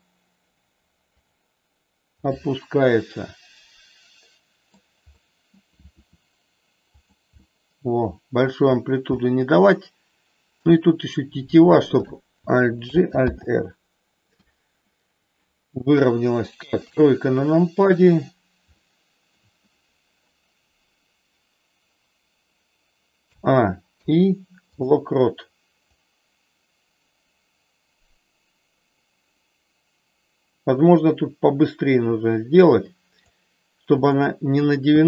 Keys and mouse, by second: 1.1 click, 2.2-4.7 middle drag, 5.2 middle click, 5.8 r, 6.8 click, 7.4-8.4 middle drag, 9.1-10.4 middle drag, 12.8 alt+g, 13.3 alt+r, 15.8 KP_1, 16.7 KP_3, 18.8 shift+middle click, 23.2 a, 23.8 i, 26.0-33.2 drag, 34.1 click.